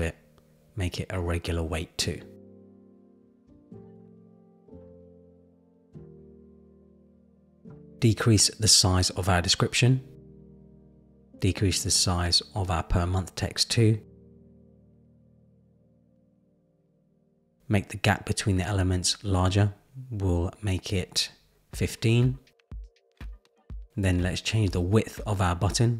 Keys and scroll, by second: 0.1 super+v, 0.5 Return, 10.5 Down, 14.8 Down, 18.8 Up, 19.3 Up, 20.2 Up, 21.1 Up, 22.1 Down, 22.7 Down.